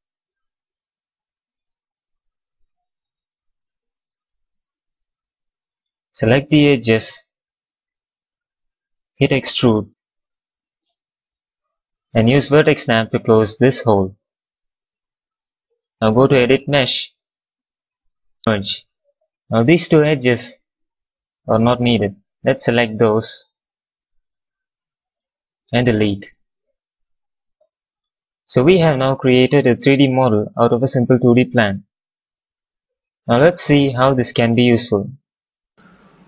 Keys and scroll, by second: 9.4 w, 12.5 v, 14.3 q, 15.3 q.